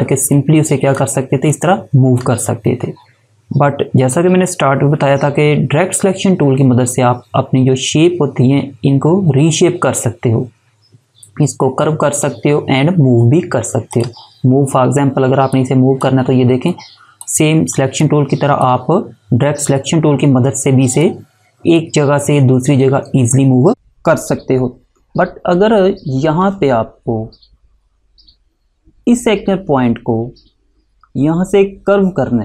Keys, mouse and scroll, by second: 0.3 click, 13.9 click, 21.0 click.